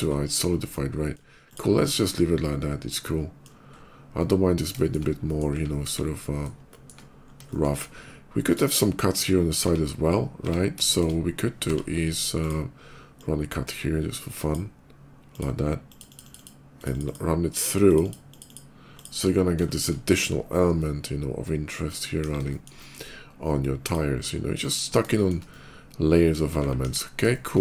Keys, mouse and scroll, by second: 0.6 middle click, 1.3 click, 1.7-3.3 middle drag, 3.6 middle click, 3.9 middle click, 4.6 shift+middle click, 5.1 shift+middle click, 5.7 KP_5, 6.4 shift+middle click, 7.1 shift+middle click, 7.3 shift+middle click, 7.7 shift+middle click, 8.2 shift+click, 9.3 Tab, 10.7 shift+Tab, 10.7 middle click, 11.3 d, 12.2 click, 12.9-14.3 drag, 15.2 click, 15.7 click, 15.9 click, 16.0 click, 16.2 click, 16.5 click, 16.9 click, 17.2 click, 17.7 click, 17.8 click, 18.0 click, 18.3 click, 18.8 click, 19.5 shift+middle click, 20.5-21.8 shift+middle drag, 22.0 KP_5, 22.3 middle click, 22.6 middle click, 23.7 click, 24.4 shift+click, 24.9 shift+middle click, 25.2 shift+middle click, 26.6 KP_5, 27.1 middle click, 27.5 middle click.